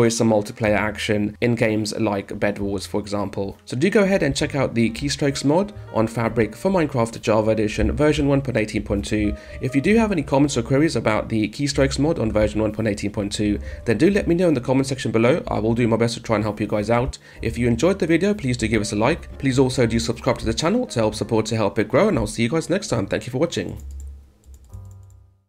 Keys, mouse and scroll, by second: 0.2 d, 1.3 a, 3.2-4.1 typing, 5.5 d, 7.6 d, 12.3 w, 16.9 d, 17.4 a, 18.8-20.2 typing, 23.5 click, 23.7 click, 24.3 click, 24.7 click, 24.9 click, 25.4 click.